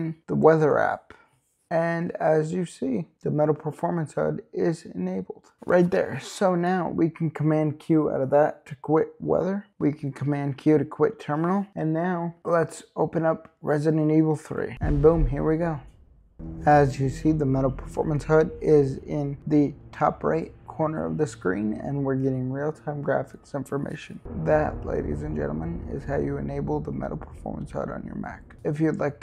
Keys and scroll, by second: 7.7 super+q, 10.9 super+q.